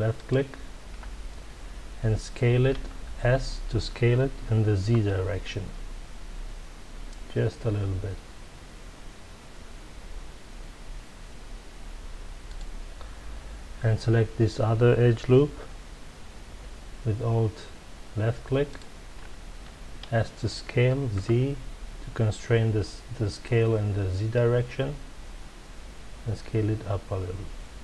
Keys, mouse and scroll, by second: 0.1 alt+click, 2.7 s, 12.5 click, 18.6 alt+click, 20.0 s.